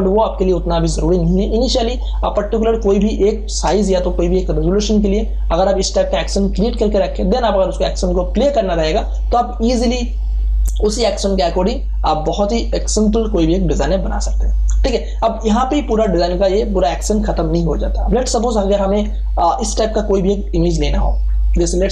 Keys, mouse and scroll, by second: 0.4 click, 2.8 space, 3.2-8.4 ctrl+drag, 14.9 space, 15.1 click, 15.4 space, 16.2 ctrl+d, 18.8 ctrl+o, 20.6 scroll down 1, 21.4 scroll up 1.